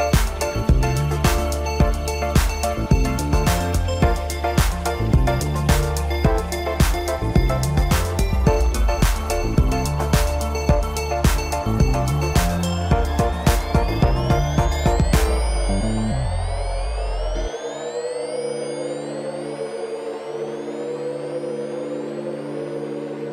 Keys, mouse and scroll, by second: 6.0-7.6 middle drag, 7.6-8.9 scroll down 9, 8.9-10.6 drag, 11.0 scroll down 2, 11.6-12.2 scroll up 2, 12.2-15.2 middle drag, 15.8-16.6 scroll down 1, 16.6 ctrl+KP_8, 16.8 ctrl+KP_8, 18.0-18.6 scroll up 1, 18.6 scroll down 2, 18.8-21.8 middle drag, 22.7 KP_1.